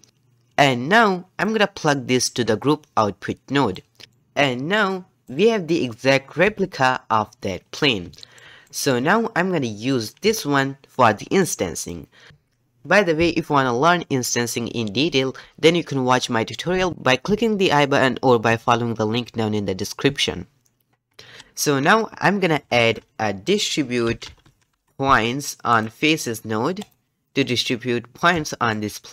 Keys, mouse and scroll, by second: 2.3-4.0 drag, 4.0-5.3 shift+middle drag, 5.3 click, 6.4 g, 8.2-26.8 shift+middle drag, 27.6-28.7 middle drag, 28.9-29.1 scroll up 2.